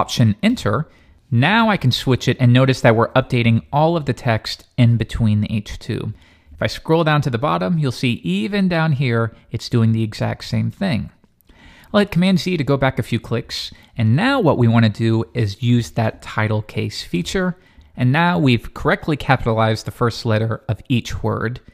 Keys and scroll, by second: 0.5 alt+Return.